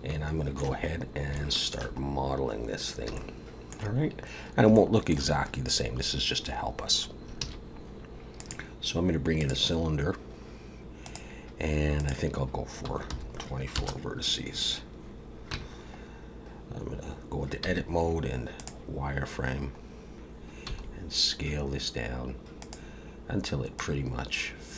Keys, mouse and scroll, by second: 1.5 shift+middle click, 2.7 scroll up 1, 3.1 shift+middle click, 4.3 scroll down 1, 4.7 shift+middle click, 7.4 shift+a, 11.1 click, 11.9 click, 15.5 Tab, 16.3-16.7 scroll up 1, 17.6 z, 20.0-20.6 scroll up 1, 20.7 s, 23.8 click.